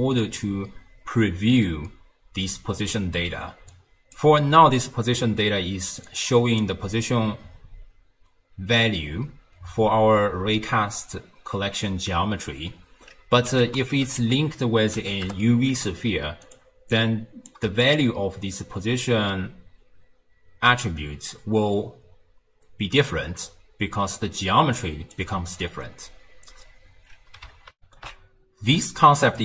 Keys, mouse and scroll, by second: 3.8 click, 6.1 click, 13.7 ctrl+a, 16.9 click, 17.9 ctrl+shift+click, 24.3 d, 24.5 click, 25.2 d, 25.2 d, 25.8 d, 27.8 n.